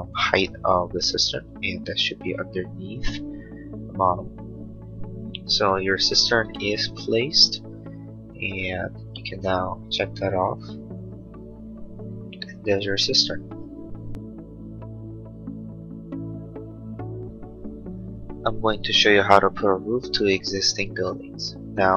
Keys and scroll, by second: 7.5 space.